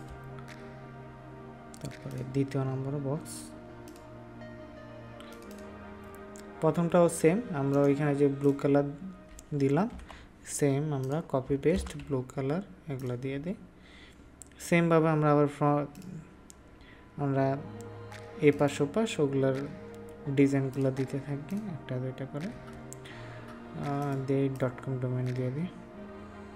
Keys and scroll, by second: 9.8 ctrl+v, 11.7 ctrl+s.